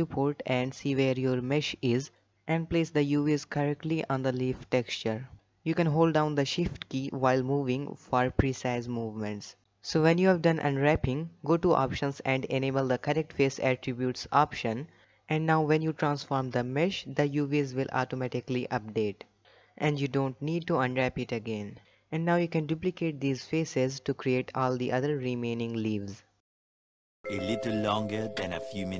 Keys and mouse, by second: 0.0 ctrl+space, 0.9 shift+click, 2.7-3.6 middle drag, 7.1 middle click, 8.4 shift+middle click, 11.4-13.2 drag, 14.8 3, 15.8-16.6 shift+middle drag, 16.8 shift+d, 18.7 middle click, 21.0 z, 22.5 shift+click, 23.7 shift+click, 23.9 z, 24.1 shift+click, 24.4 shift+middle drag, 24.9 shift+1, 25.0 shift+click, 25.2 g, 25.9 shift+drag, 26.2 shift+middle drag, 26.7 g.